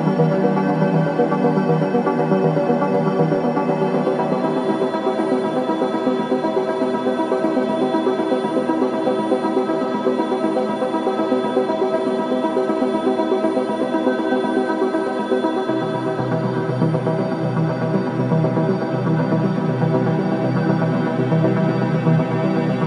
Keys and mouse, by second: 0.0 click, 1.5 click, 2.7 click, 3.4 click, 3.8 click, 5.4 click, 5.8 click, 6.3 click, 7.9 click, 9.2 click, 12.3 click, 14.9 super+d, 16.2 click.